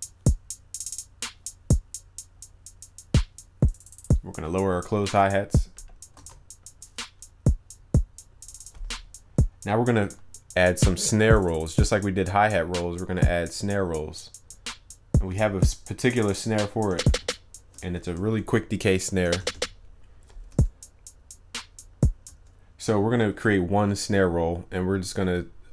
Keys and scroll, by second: 6.2 ctrl+s.